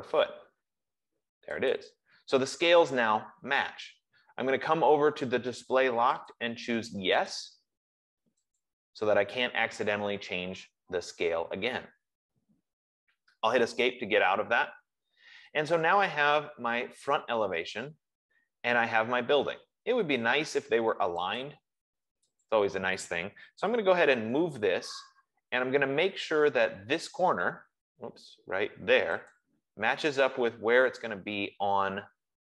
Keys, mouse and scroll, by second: 2.0 click, 6.7 click, 7.8 click, 9.0 click, 13.7 Escape, 15.5 F15, 21.8 click, 24.0-25.1 typing, 29.6 click.